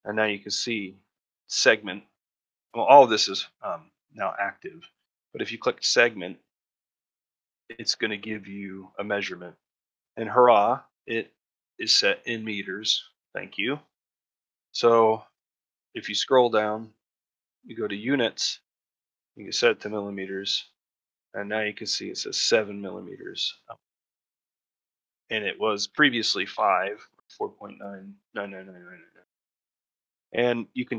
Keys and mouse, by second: 6.9 middle click, 7.7 shift+middle click, 24.8 shift+middle click.